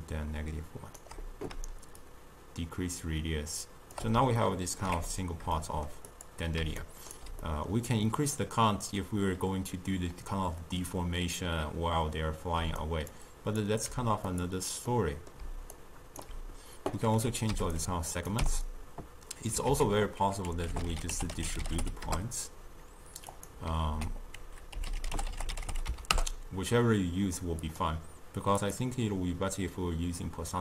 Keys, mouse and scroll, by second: 4.5-6.2 ctrl+middle drag, 6.2 click, 6.7 d, 6.9 right click, 7.3 d, 7.5-10.6 middle drag, 12.7 d, 12.9 click, 13.2 d, 13.4 click, 13.7 d, 14.4 click, 15.0-15.5 middle drag, 15.5 d, 15.9 right click, 16.4 d, 17.4 click, 18.2 click, 19.8 ctrl+a, 24.0 ctrl+a, 28.6-30.6 drag.